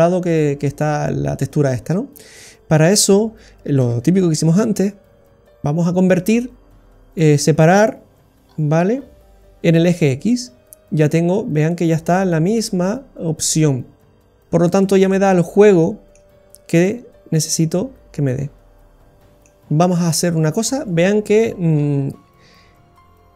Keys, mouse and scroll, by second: 1.9-2.4 scroll down 6, 2.4 middle click, 2.9 scroll down 1, 3.8 shift+a, 8.4-9.1 scroll up 8, 11.4 scroll down 2, 11.7 middle click, 14.3-15.3 scroll down 6, 14.8 middle click, 15.3-15.8 scroll up 9, 15.8 middle click, 16.8 click, 19.2 middle click, 19.2-20.7 scroll down 8, 21.1 scroll down 1, 21.5-22.3 scroll up 8.